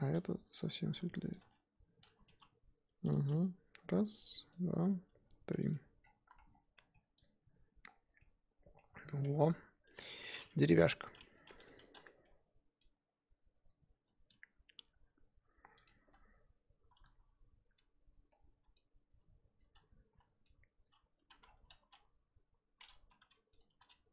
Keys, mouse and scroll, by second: 0.7 click, 0.9 g, 2.2 l, 3.4 g, 4.5 click, 4.8 g, 5.7 Tab, 6.0-6.7 scroll down 5, 6.1 z, 6.7-7.1 middle drag, 7.1 click, 7.8-8.2 scroll down 3, 8.2-8.9 middle drag, 8.9-9.5 scroll up 5, 9.5 click, 9.8 Tab, 10.0-10.7 scroll up 1, 10.7 KP_1, 11.9 z, 12.0-13.7 shift+middle drag, 13.7 click, 14.4-15.8 scroll up 4, 15.8 alt+click, 16.9 ctrl+KP_Add, 16.9 ctrl+KP_Add, 19.6 shift+Left, 21.3 z, 21.4-22.1 scroll down 2, 23.0 s.